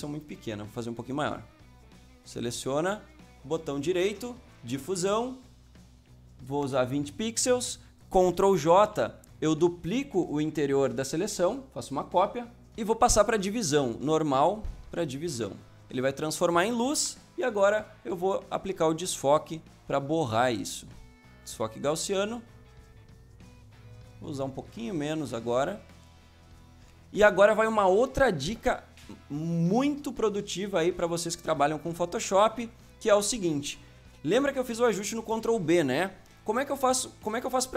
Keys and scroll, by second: 0.2 ctrl+z, 6.6 Return, 8.8 ctrl+j, 16.9 Return.